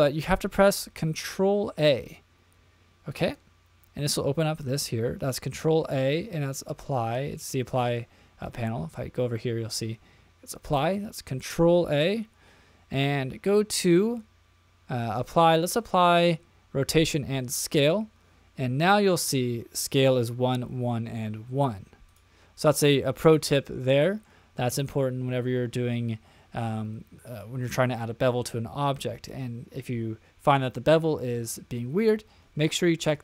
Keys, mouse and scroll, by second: 1.7 ctrl+a, 9.4 ctrl+a, 22.1 click, 22.7-23.6 middle drag, 23.8-26.5 middle drag.